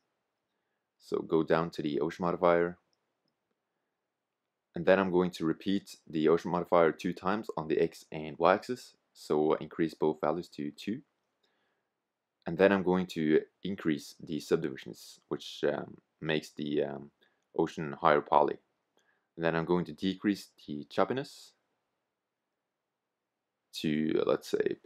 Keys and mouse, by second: 4.7-10.1 drag, 12.9-20.1 drag, 22.1 BackSpace.